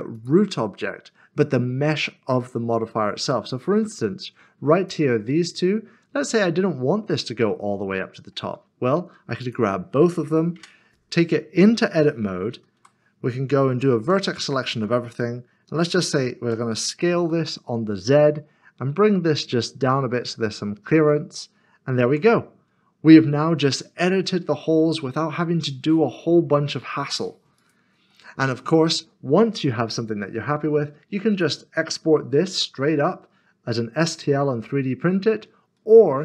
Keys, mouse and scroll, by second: 0.1 middle click, 4.8 click, 7.9 middle click, 9.4 shift+click, 12.7 typing, 14.0 typing, 16.4-17.2 typing, 20.9 click, 23.1 middle click, 27.6 click, 28.1 middle click, 29.1 scroll down 1, 29.9 middle click, 30.3 scroll up 1, 31.3 click, 31.8 middle click, 35.7 middle click.